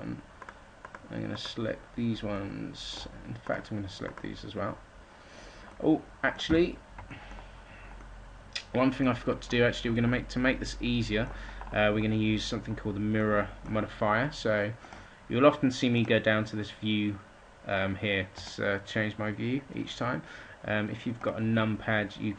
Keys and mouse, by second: 6.3 a, 14.9-15.9 middle drag.